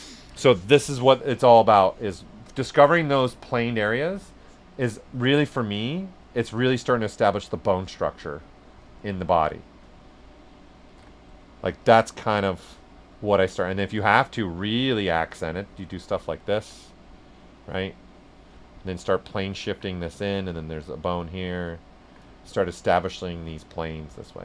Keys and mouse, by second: 0.6 right click, 1.3 s, 1.5 click, 5.4 s, 5.5-7.3 drag, 7.3 click, 7.3 typing, 9.0 shift+click, 12.1 alt+click, 13.1 alt+right click, 13.8 alt+click, 16.9 right click, 18.0 alt+click, 19.8 right click, 20.2 right click, 20.6 alt+click, 23.2 right click.